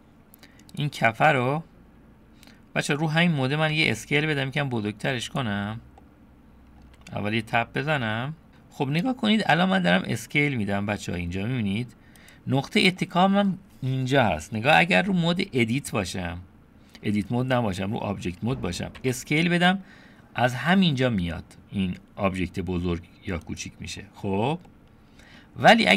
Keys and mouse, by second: 0.9 click, 3.8 s, 5.4-6.0 drag, 6.0 middle click, 7.0 Tab, 13.0 middle click, 14.7 middle click, 15.3 Tab, 19.0 s, 24.7 click.